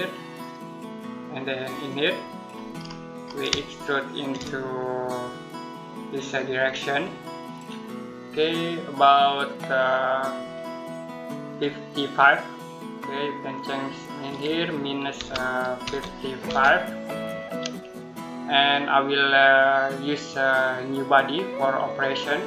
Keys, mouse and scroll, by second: 0.2 click, 2.4 scroll down 1, 2.6-3.3 scroll up 1, 3.5 shift+middle click, 5.5 click, 13.4 click, 15.0-16.3 typing, 19.9 click.